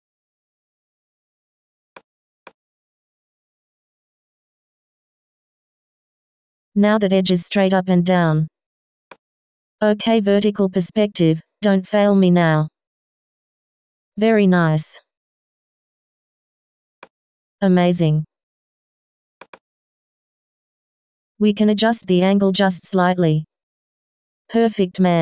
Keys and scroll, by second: 2.8 2, 21.9 BackSpace, 22.6 |.